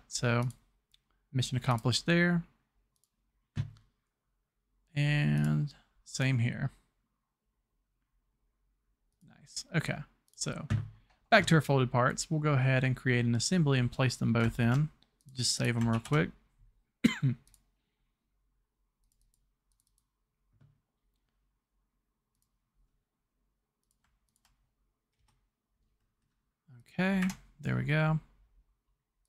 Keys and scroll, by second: 14.6 ctrl+s, 16.0 s, 25.2 ctrl+Return, 27.2 Return, 27.2 Escape.